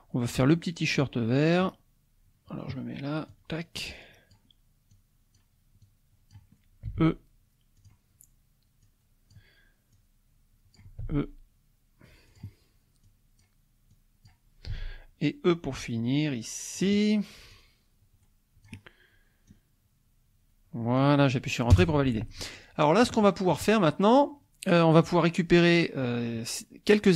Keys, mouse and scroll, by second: 3.3-4.5 drag, 4.9 click, 5.8 click, 6.9 e, 7.8 click, 8.9 click, 10.0 click, 11.1 e, 12.3 click, 13.1 click, 13.9 click, 14.8 e, 16.8 click, 17.5-18.8 drag, 19.5-21.2 drag, 21.7 Return, 22.6 scroll down 2, 23.2 shift+middle click, 23.8-24.2 shift+scroll up 3.